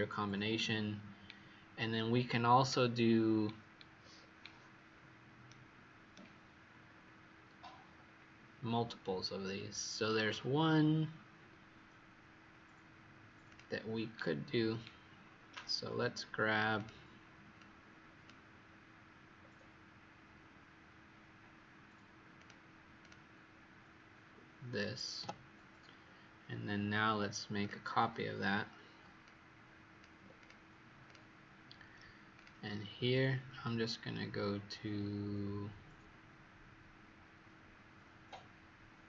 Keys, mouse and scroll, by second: 0.6-1.7 scroll down 4, 1.7-2.8 scroll up 4, 2.8-3.8 scroll down 1, 4.1-4.8 scroll down 1, 4.8-5.4 scroll up 2, 5.4 right click, 6.8-7.7 scroll down 3, 7.7-8.7 scroll up 5, 8.7-9.1 scroll up 2, 13.4 click, 14.3-15.2 scroll down 3, 15.2-16.7 scroll up 2, 16.7 click, 19.3-19.8 scroll down 2, 22.3 click, 22.9 click, 25.1 Delete, 27.5 click, 30.3 click, 31.0 click, 32.3 click.